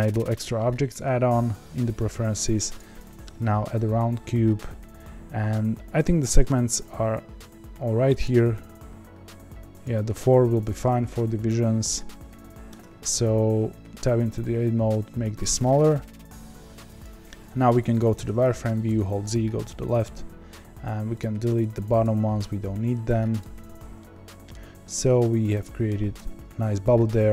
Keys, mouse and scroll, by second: 8.2-9.9 drag, 12.7 Tab, 14.3 s, 18.8 z, 19.5 KP_1, 20.2-21.2 scroll up 4, 21.2 click, 22.0 click, 23.3 x, 23.9 middle click, 24.5-25.0 scroll down 1, 25.0 z, 25.6 middle click, 26.1 Tab, 26.5-27.1 scroll down 1, 27.1-27.3 middle drag.